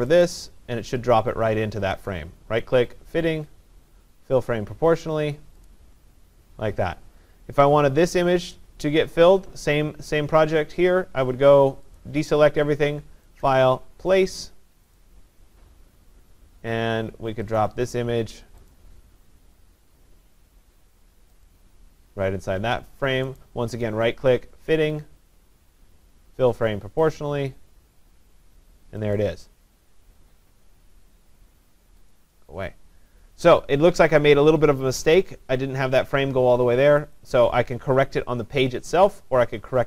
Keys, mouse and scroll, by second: 2.1 right click, 5.7 click, 12.0 click, 13.5 click, 15.0 click, 17.6 click, 18.7 click, 21.5 click, 23.4 right click, 23.4 click, 27.2 click, 29.2 click, 32.1 click, 37.2 click.